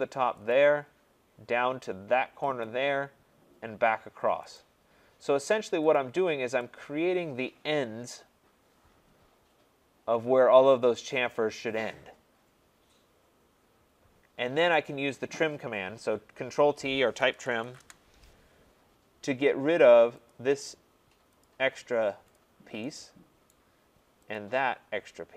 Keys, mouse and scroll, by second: 0.5 click, 2.6 click, 4.5 click, 5.9 click, 14.7 right click, 17.3-17.8 typing, 20.3 click, 21.4 click, 22.3 click, 23.5 right click, 24.3 click.